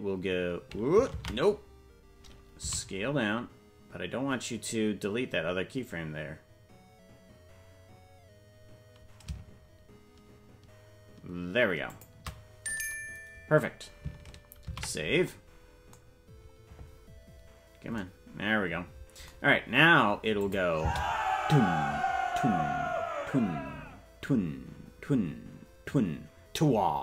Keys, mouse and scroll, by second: 1.7 ctrl+z, 2.6 s, 17.4 ctrl+s, 20.4 click, 20.8 space.